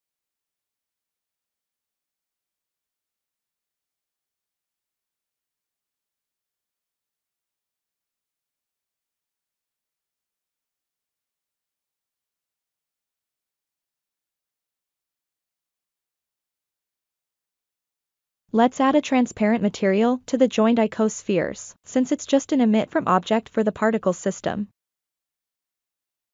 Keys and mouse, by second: 3.9 KP_1, 6.1 click, 6.8 alt+z, 9.5 alt+z, 14.2 click, 18.4 click, 21.4-24.3 drag.